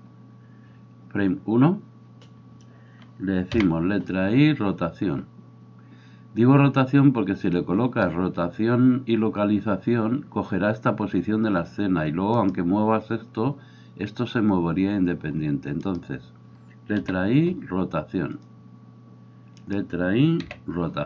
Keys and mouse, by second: 0.0-21.0 drag, 12.5-17.0 middle drag, 12.5-17.0 right drag, 19.6 middle click, 19.6 right click, 20.5 i.